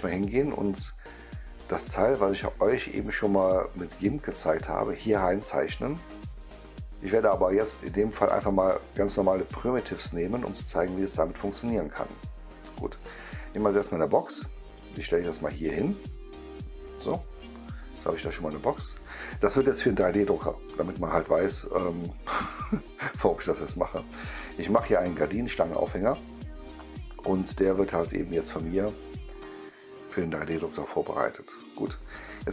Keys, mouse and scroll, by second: 1.2-1.5 scroll down 1, 2.0 scroll down 1, 3.0-3.3 scroll up 1, 13.2 click, 16.9 click, 17.7-19.2 right drag, 25.9-27.9 right drag, 29.2 click, 31.6 click.